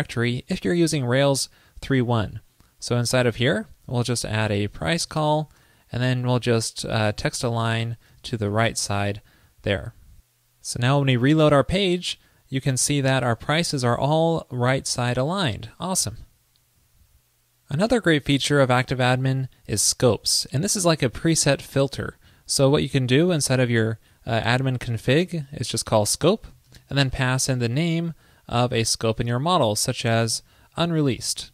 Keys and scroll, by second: 9.1 super+s, 11.3 super+r.